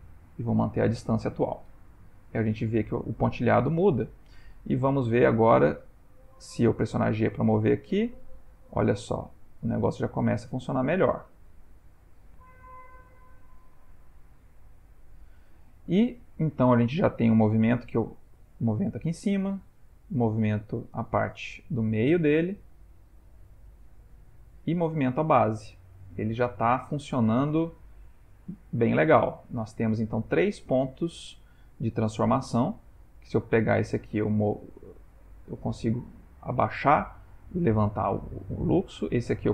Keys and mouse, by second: 3.2 Tab, 3.7 ctrl+middle click, 4.0 ctrl+middle click, 4.6 click, 5.4 r, 7.0 g, 16.4 click, 16.8 g, 19.7 click, 20.0 g, 25.1 click, 25.3 g, 28.7 click, 29.0 g, 38.7 click, 39.1 r.